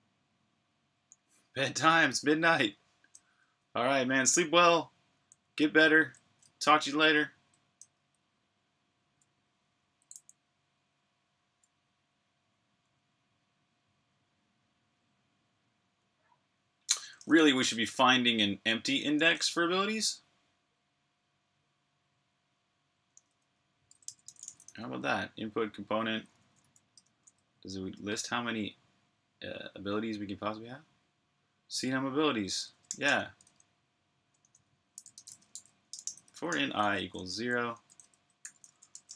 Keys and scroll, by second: 5.0 j, 6.3-7.6 typing, 9.9 j, 17.1-18.3 typing, 21.0 typing, 22.8-25.0 typing, 25.6 Tab, 25.8 Tab, 26.0 Tab, 26.3 Tab, 26.4 Tab, 26.8 Return, 32.7 typing, 34.0-35.7 typing, 36.8-37.8 typing.